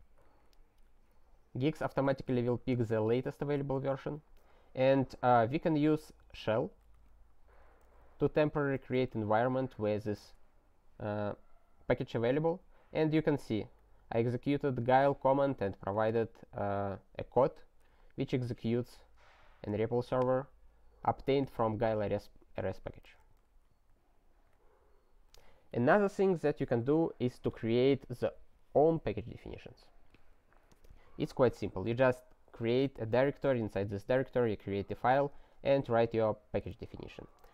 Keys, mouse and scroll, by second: 0.2 alt+w, 1.6 ctrl+n, 1.7 ctrl+a, 1.9 ctrl+space, 2.0 ctrl+n, 2.4 ctrl+n, 3.0 ctrl+p, 3.2 ctrl+e, 3.7 alt+w, 6.5 click, 8.0 ctrl+t, 8.9 ctrl+t, 9.3 ctrl+y, 10.3 Return, 13.8 click, 15.0 click, 15.9 click, 16.1 double click, 18.3 click, 19.4 click, 20.2 click, 21.3 click, 21.4 double click, 23.2 ctrl+c, 24.4 alt+w, 36.5 ctrl+c, 37.4 c.